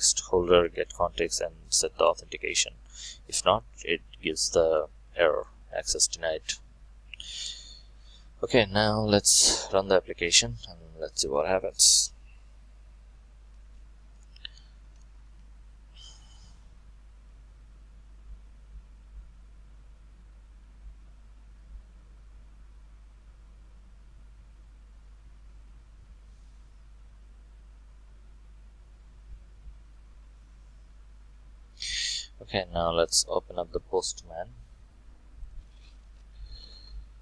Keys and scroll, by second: 9.8 shift+F9.